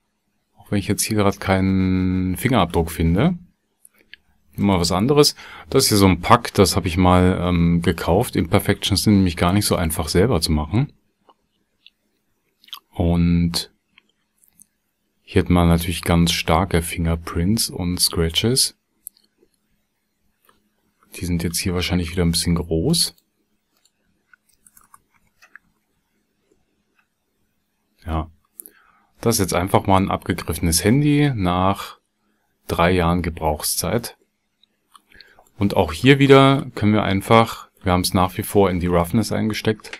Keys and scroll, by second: 24.7 BackSpace, 25.1 KP_1, 25.7 KP_Enter.